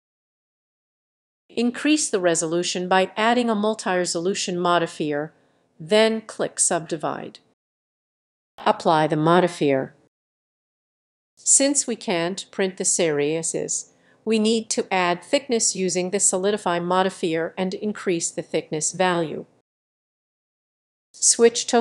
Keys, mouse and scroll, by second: 0.0-3.0 drag, 4.6-21.8 drag.